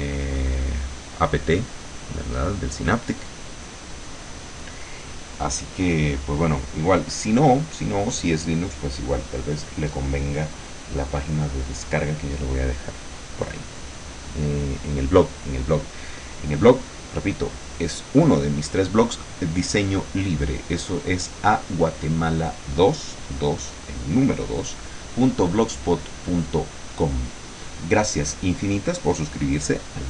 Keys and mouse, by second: 4.0-5.6 drag, 6.1-7.7 drag, 11.5-20.0 drag, 26.6 click, 29.5 click.